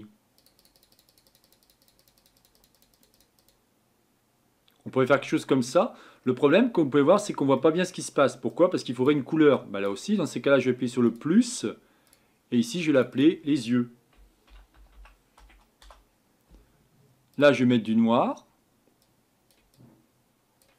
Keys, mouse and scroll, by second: 13.1-18.0 drag.